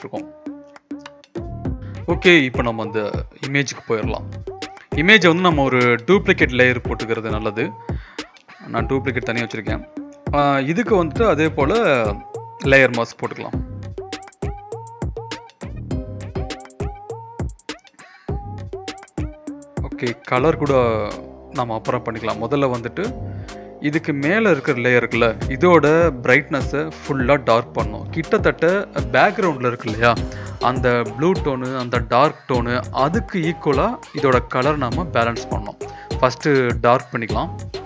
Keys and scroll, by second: 1.2 v, 1.9 ctrl+l, 3.0 Escape, 9.3 z, 10.9 v, 16.3 ctrl+BackSpace, 22.1 ctrl+z, 24.7 ctrl+l.